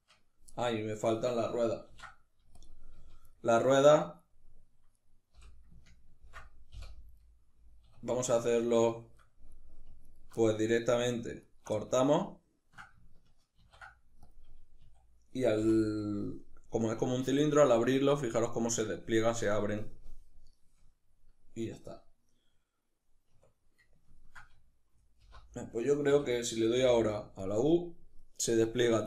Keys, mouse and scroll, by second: 0.1-4.6 middle drag, 1.5 ctrl+e, 2.6 z, 4.6 right click, 5.0 l, 5.9 ctrl+i, 6.4 h, 6.8-9.7 middle drag, 7.5 \, 9.7 alt+right click, 10.1-11.1 middle drag, 11.1 alt+right click, 11.4-29.0 middle drag, 13.2 ctrl+e, 14.4 a, 22.9 \, 24.9 alt+h.